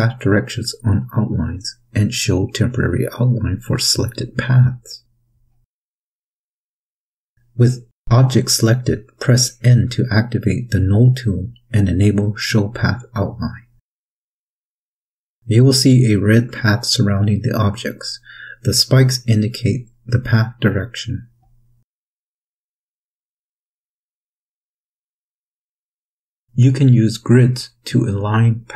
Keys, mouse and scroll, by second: 0.9 click, 3.6 click, 6.7 n, 11.1 click, 12.9 click, 16.5 click, 17.9 click, 20.7 click, 21.3 click.